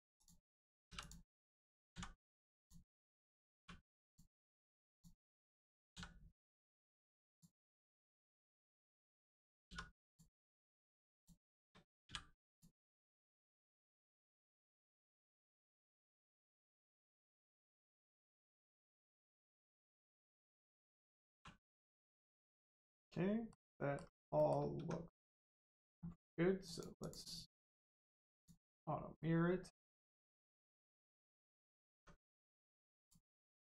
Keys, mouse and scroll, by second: 0.1 click, 4.0 click, 4.9 shift+click, 5.9 x, 7.2 click, 7.7 middle click, 9.6 2, 10.0 click, 11.1 shift+click, 12.4 click, 12.8 Tab, 13.2 middle click, 13.4-13.8 scroll down 1, 13.8 Tab, 14.1 middle click, 15.2 scroll down 1, 15.5 shift+middle click, 16.2 middle click, 16.3 middle click, 16.6-17.3 scroll up 1, 17.3 middle click, 18.2 middle click, 20.2 Tab, 21.3 1, 21.6 middle click, 24.0-24.3 scroll down 1, 24.3 middle click, 24.7 Tab, 26.6 click, 29.1 middle click, 31.0 scroll up 1, 31.9 Tab, 32.4 middle click, 33.0 click, 33.2 middle click.